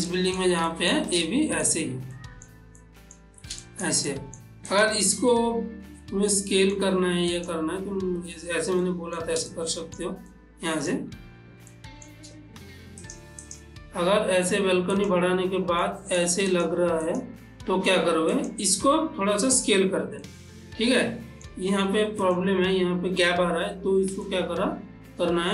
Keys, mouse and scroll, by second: 0.1 shift+middle click, 1.3 shift+middle click, 2.2-3.7 shift+middle drag, 4.7 click, 5.3-7.4 middle drag, 7.4 click, 8.9 ctrl+middle click, 9.7-13.0 shift+middle drag, 13.0 click, 15.0 click, 15.9-17.7 middle drag, 18.4 click, 20.3-22.2 middle drag, 22.3 click, 24.3-25.5 middle drag.